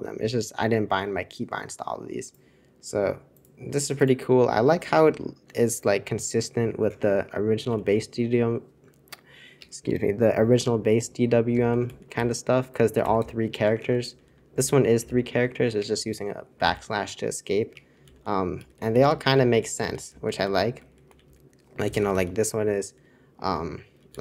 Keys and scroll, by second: 7.4-8.1 typing, 9.7 Escape, 9.7 typing, 11.2-22.7 typing, 15.6 Escape, 17.7 Escape, 24.1-24.2 typing.